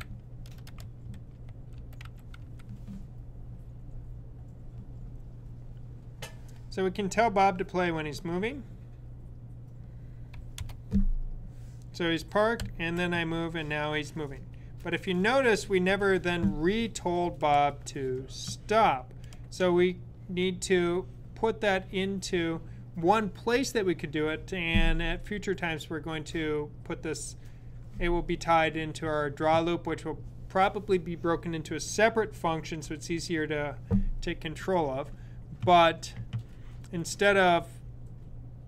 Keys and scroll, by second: 0.0-2.3 typing, 12.5 Right.